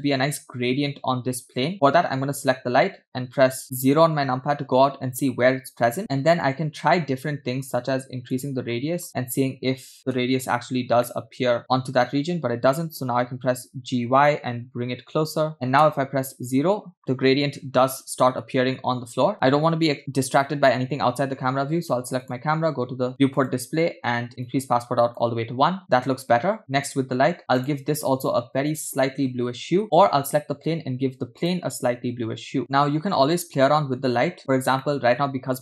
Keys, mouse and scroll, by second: 4.3-5.0 scroll down 1, 5.0-5.4 scroll down 2, 6.4-8.4 drag, 9.3 KP_0, 10.5 KP_0, 11.6 middle click, 11.6 scroll up 2, 13.2 g, 16.1 KP_0, 22.2 click, 23.3 click, 24.0-24.4 scroll down 1, 24.4 click, 26.8 click, 27.6 click, 29.8 drag, 31.4 click, 33.9-34.6 scroll up 4, 34.9-35.6 shift+middle drag.